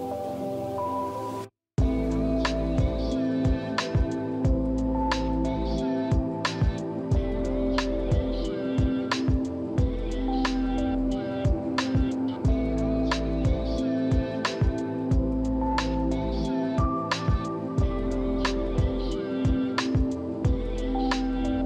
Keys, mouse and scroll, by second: 3.5 6, 3.7 5, 3.8 0, 3.9 Return, 4.8 middle click, 6.5 scroll up 2, 7.5-8.0 scroll down 2, 8.6-9.2 scroll up 3, 9.2-11.8 scroll down 5, 13.2-14.0 scroll up 3, 14.0 scroll down 2, 14.8 scroll down 1, 15.5 scroll down 2, 16.1 scroll up 2, 16.5-16.8 scroll down 2.